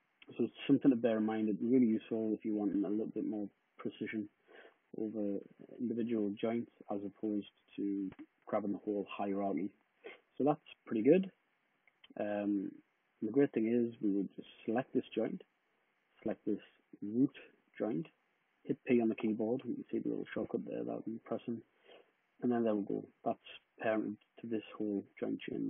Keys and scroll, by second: 1.7 d, 5.1 d, 18.9 p.